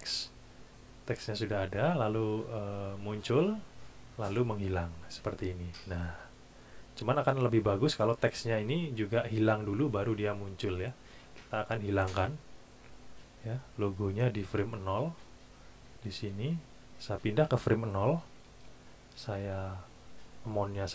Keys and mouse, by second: 2.6 click, 11.7 click, 13.5 click, 16.2 click, 17.2 click, 18.2 KP_0, 18.5 KP_Enter, 20.5 click.